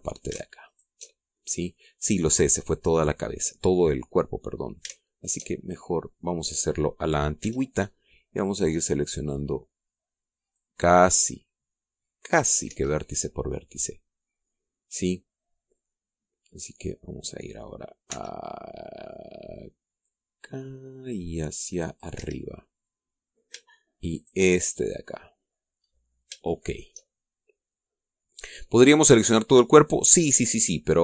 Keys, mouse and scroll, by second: 0.4 middle click, 1.6 alt+shift+right click, 2.1-2.5 alt+shift+scroll down 3, 2.6-4.8 right drag, 5.3 right click, 6.1 alt+shift+right click, 6.4 alt+shift+scroll up 1, 6.9 middle click, 8.3 c, 8.7-9.1 scroll up 1, 9.1-11.2 middle drag, 11.4-13.6 drag, 13.6 Escape, 13.8-17.7 middle drag, 19.0 c, 20.9-23.1 drag, 23.1 Escape, 23.3-24.4 middle drag, 25.0 shift+right click, 25.5 shift+scroll down 2, 25.8 click, 26.7-27.0 scroll up 1, 27.5 shift+click, 28.3-31.0 middle drag.